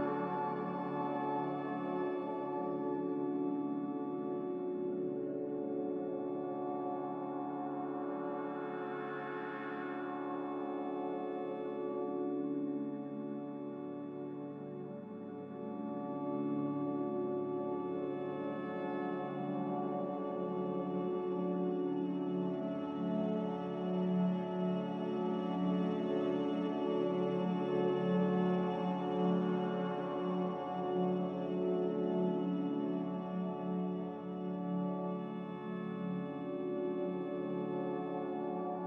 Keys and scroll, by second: 8.9 a, 12.0 q, 21.6 ctrl+z, 24.1 Delete, 24.1 b, 33.2 n, 37.8 a.